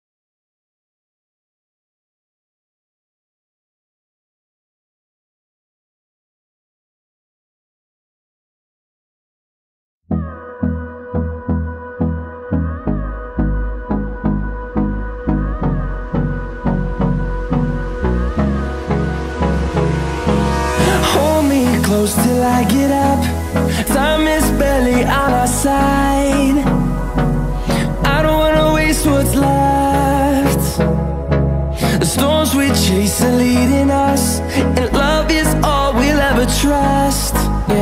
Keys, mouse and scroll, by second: 4.7 click, 20.5 KP_1, 21.4-22.0 scroll up 4, 22.9 click, 24.4 s, 26.5 g, 29.2-29.6 scroll up 2, 29.6 shift+middle click, 30.3-31.0 scroll up 1, 31.0-32.7 shift+middle drag, 32.7 g, 36.8 KP_3, 37.4-37.8 scroll down 13.